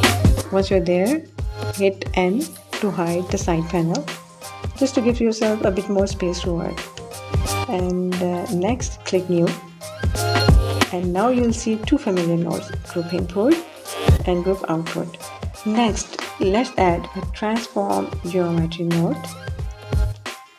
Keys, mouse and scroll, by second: 0.6 n, 2.8 click, 8.2 click, 10.3 middle click, 11.4-11.9 middle drag.